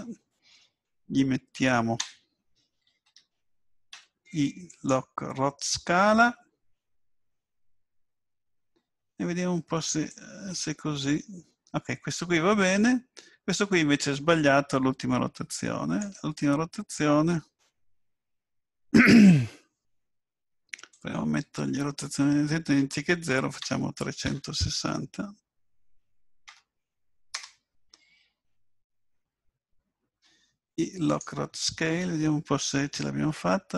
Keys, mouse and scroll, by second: 10.1 click, 20.9 click, 30.2 i, 32.6 click.